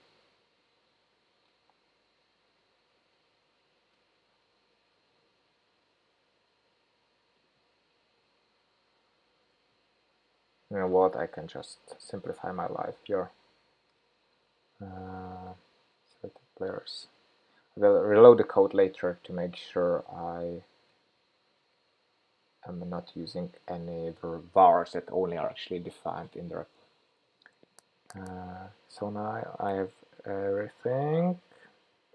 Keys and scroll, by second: 2.2 alt+Up, 3.3 super+v, 13.3 shift+super+p, 20.4 shift+super+p.